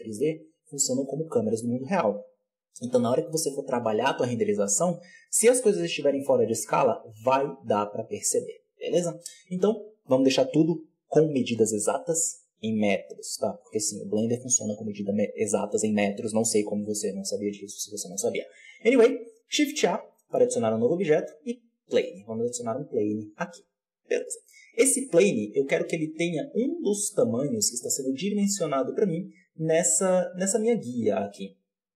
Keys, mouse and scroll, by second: 17.9-18.7 scroll up 1, 18.7 shift+a, 24.1-24.9 scroll down 1, 24.9-25.8 scroll up 1, 25.8 g, 30.0-31.9 scroll up 1.